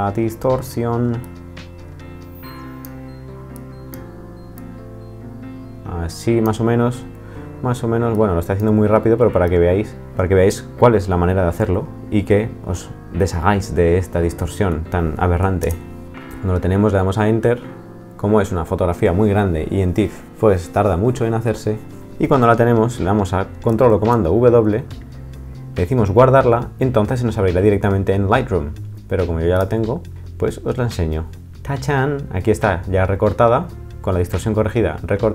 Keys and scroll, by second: 15.6 Return, 23.9 super+w.